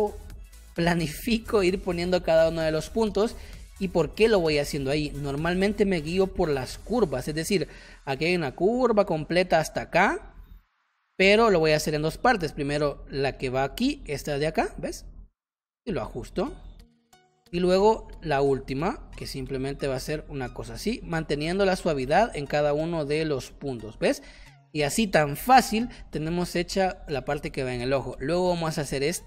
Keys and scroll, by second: 5.0 space, 17.1 space, 22.0 space, 26.2 space, 28.6 space.